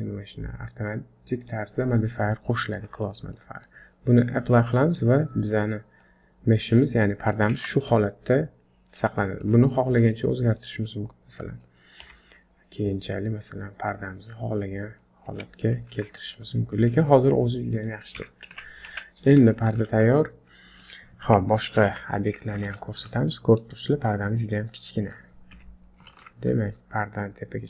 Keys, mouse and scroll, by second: 1.4 click, 2.4 middle click, 3.0 shift+middle click, 3.4 middle click, 4.5-4.8 scroll down 2, 4.7 middle click, 5.5 scroll up 3, 6.0 middle click, 7.6 Tab, 7.9 middle click, 9.2 shift+middle click, 10.0 click, 10.9 click, 11.5 middle click, 12.1 g, 15.6 middle click, 16.2 shift+middle click, 16.6-16.9 scroll down 2, 16.9 middle click, 18.2 KP_1, 18.9 Tab, 19.1-19.5 scroll down 3, 19.5 shift+middle click, 19.9 z, 21.9 alt+h, 22.5 scroll down 1, 22.8 shift+middle click, 23.5 click, 23.9-24.2 scroll down 2, 24.1 middle click, 25.5 KP_1, 26.1 shift+z, 26.4 scroll up 4.